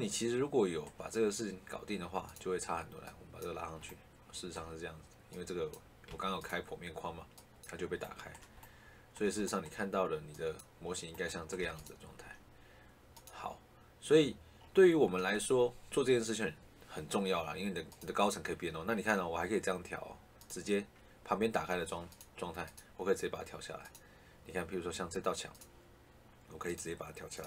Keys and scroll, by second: 6.0 Escape, 11.5 Escape.